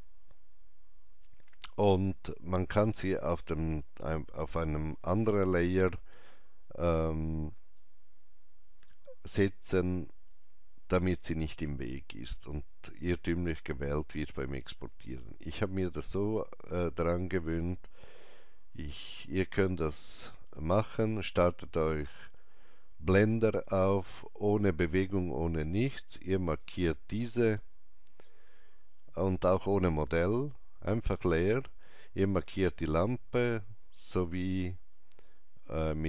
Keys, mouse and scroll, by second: 7.6 click, 26.5 click, 33.6 click.